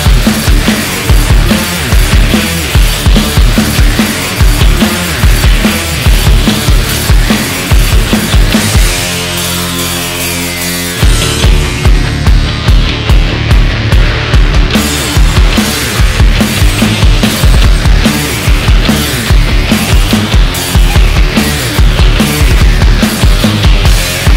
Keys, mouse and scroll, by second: 0.8-2.7 shift+middle drag, 2.7-3.7 scroll down 1, 3.7-6.1 middle drag, 6.1 KP_1, 6.7-7.4 scroll up 2, 7.4-9.2 shift+middle drag, 9.2-9.9 scroll up 1, 9.9-12.4 shift+middle drag, 12.4-13.0 scroll up 1, 13.0-13.6 middle drag, 13.6 Tab, 16.3-17.8 middle drag, 17.8 click, 18.8 ctrl+shift+click, 19.5 scroll down 1, 19.8 KP_1, 20.4-21.5 shift+middle drag, 21.5-22.2 scroll down 1, 22.2-24.3 shift+middle drag.